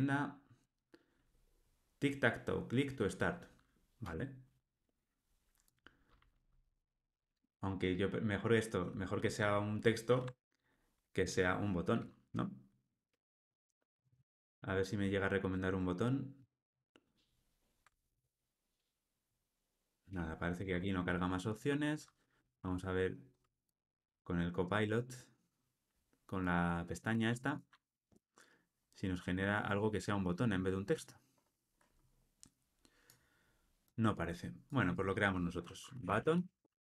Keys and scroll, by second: 4.0 Tab, 16.3 alt+].